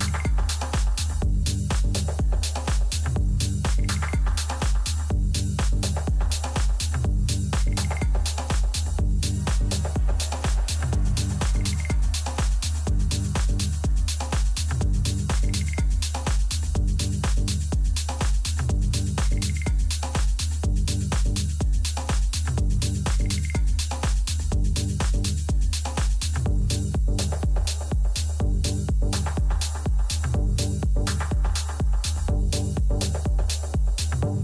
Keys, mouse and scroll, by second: 2.4 a, 2.8 a, 3.7 KP_3, 4.4 z, 6.6 a, 7.1 a, 8.4-10.3 drag, 8.9 a, 9.2 a, 10.0 b, 11.8-13.7 drag, 13.8 a, 14.6 middle click, 15.5 a, 15.8 a, 16.6 b, 18.3-20.3 drag, 21.3-23.2 middle drag, 22.7 a, 24.9 a, 25.5 a, 30.7 a, 31.2 a, 32.3-34.4 middle drag.